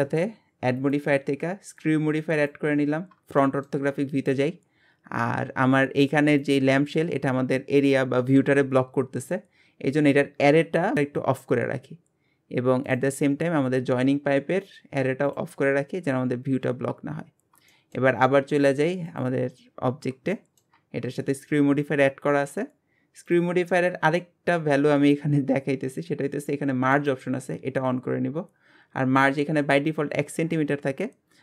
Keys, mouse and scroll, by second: 2.5 click, 3.4 shift+middle click, 3.9-4.7 scroll up 2, 4.7-5.4 scroll down 1, 5.4 Tab, 6.3 click, 12.9 click, 15.3 click, 16.8 scroll up 1, 17.4 scroll down 1, 17.7-19.1 shift+middle drag, 19.1 click, 19.7 scroll up 1, 20.3-21.9 shift+middle drag, 21.9-23.3 scroll up 2, 23.3-26.3 drag, 26.9 click, 30.6-31.4 scroll up 2.